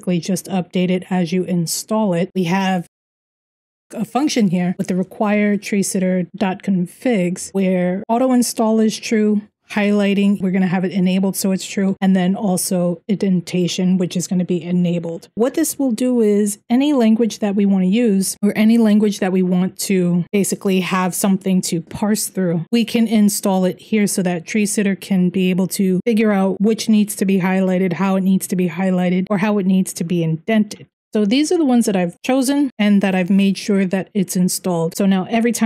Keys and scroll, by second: 2.2-4.8 typing, 6.6-7.6 typing, 9.4 typing, 11.4 typing, 31.1 j, 31.4 j, 31.5 j.